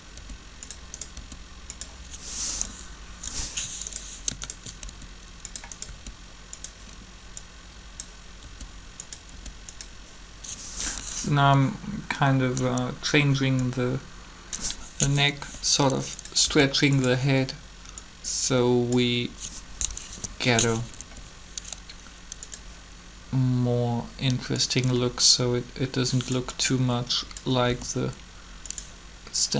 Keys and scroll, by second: 0.1 r, 1.1 r, 4.9 shift+r, 5.8 r, 8.4 r, 9.3 r, 15.4 r, 16.4 r, 19.9 Right, 21.0 r, 27.7 r.